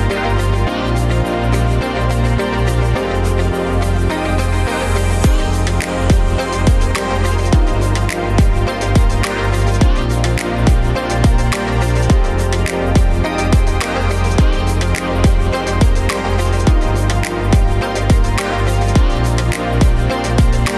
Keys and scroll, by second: 3.4 ctrl+g, 4.3-5.5 typing, 10.9 typing, 12.0-13.0 typing.